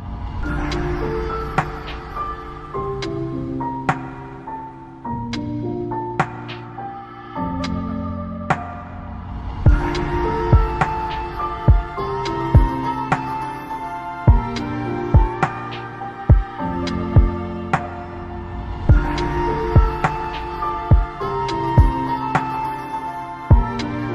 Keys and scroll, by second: 1.0 ctrl+z, 12.4 ctrl+Home, 21.6 ctrl+g.